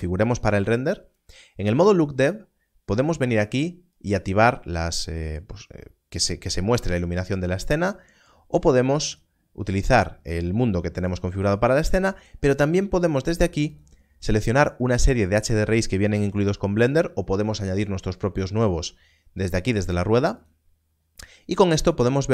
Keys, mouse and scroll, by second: 3.9 click, 7.2 click, 11.0 click, 13.7 click, 20.3 click.